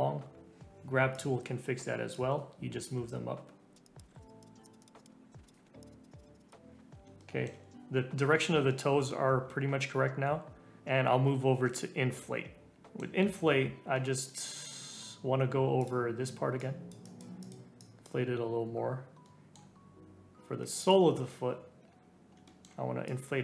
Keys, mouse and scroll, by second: 1.1-4.0 drag, 4.0 ], 4.2 click, 4.5 [, 4.5 [, 4.6 [, 4.6 click, 5.1-5.6 scroll down 3, 5.1 middle click, 5.5 click, 5.6 scroll up 3, 5.8 click, 6.5 scroll down 1, 6.6 scroll up 1, 6.7 scroll down 1, 6.9 scroll up 3, 7.2 shift+middle click, 9.3-10.3 scroll up 1, 12.7-14.3 middle drag, 14.3 scroll down 2, 15.8 click, 16.6-19.2 drag, 19.2-20.8 middle drag, 20.8 click, 21.9 scroll up 3, 22.4 shift+middle click, 23.0-23.4 drag.